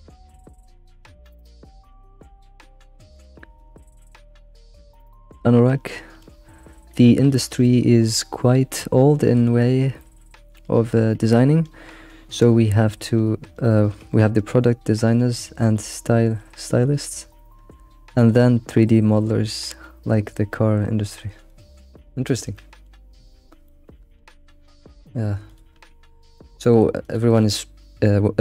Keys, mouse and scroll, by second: 0.0 g, 0.8 g, 10.0-13.1 shift+middle drag, 22.3-23.0 shift+middle drag, 23.0-23.6 scroll up 5, 23.6-24.2 middle drag, 24.2 g, 25.7 g, 25.8 g, 26.6-27.0 shift+middle drag, 27.0 click, 27.3-28.4 shift+middle drag.